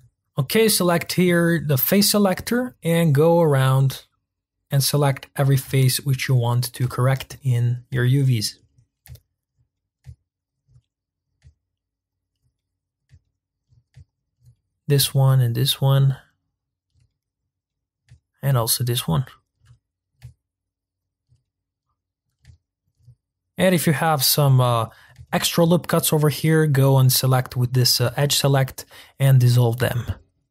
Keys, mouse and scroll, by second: 0.0-0.3 scroll up 1, 0.3 scroll down 1, 0.4-0.9 scroll up 1, 1.9 click, 2.5 scroll up 1, 3.5 click, 5.0-6.1 middle drag, 6.1 shift+click, 6.4-8.5 middle drag, 8.5 shift+click, 9.4 shift+click, 9.7 middle click, 10.5 shift+click, 10.8-12.2 middle drag, 12.2 shift+click, 12.5-14.1 middle drag, 14.1 shift+click, 14.5-16.6 middle drag, 16.6 shift+click, 17.0-19.3 middle drag, 19.3 shift+click, 19.7-21.1 middle drag, 21.1 shift+click, 21.4-23.3 middle drag, 23.3-23.9 scroll up 4, 23.9-30.0 middle drag, 30.0-30.5 scroll down 2.